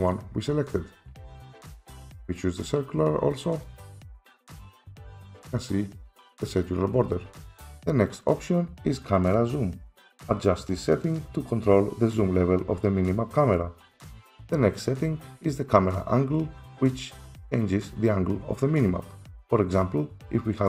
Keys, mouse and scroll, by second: 0.1 click, 1.9 click, 3.7 click, 4.4 click, 7.6 F4.